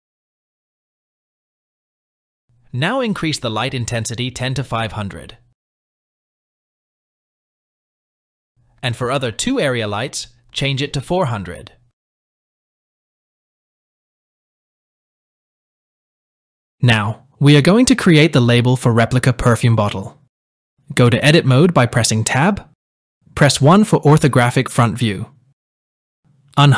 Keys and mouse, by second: 0.5 r, 3.1 click, 4.6-8.2 drag, 7.0 KP_0, 10.6 click, 12.3-13.4 drag, 13.0 KP_0, 14.4-15.4 drag, 15.0 KP_0, 16.2 KP_1, 16.4 click, 22.5 Tab, 24.2 KP_1, 25.8 shift+middle click.